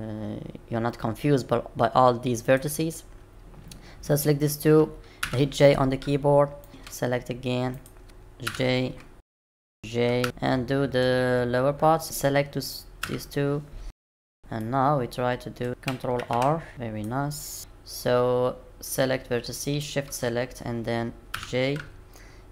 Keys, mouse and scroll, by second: 2.4 click, 5.2 j, 6.6 click, 6.7 click, 7.7 shift+click, 8.5 j, 9.2 click, 9.3 shift+click, 9.3 j, 9.4 click, 9.5 shift+click, 9.6 j, 9.6 click, 9.7 shift+click, 10.2 ctrl+z, 10.2 middle click, 12.0 click, 12.0 shift+click, 13.0 j, 13.8 shift+click, 13.9 j, 14.0 click, 14.0 shift+click, 14.1 j, 14.2 shift+click, 14.3 j, 14.6 middle click, 15.7 click, 16.2 ctrl+r, 16.7 click, 19.6 shift+click, 21.3 j.